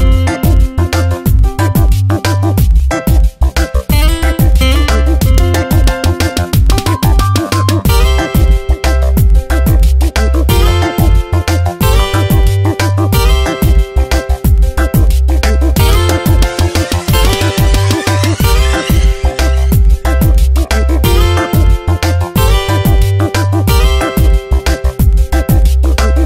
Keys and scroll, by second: 3.4 Return, 3.9 v, 5.7 ctrl+t, 7.5 Return, 9.3 alt+Down, 9.6 shift+Right, 9.8 shift+Down, 10.2 ctrl+t, 14.3 Return, 15.8 alt+Right, 16.1 shift+Down, 16.4 shift+Right, 16.7 ctrl+t, 19.5 Return, 19.8 space, 21.0 alt+Right, 21.2 shift+Down, 22.0 space, 22.6 ctrl+t, 24.5 Return, 24.7 space.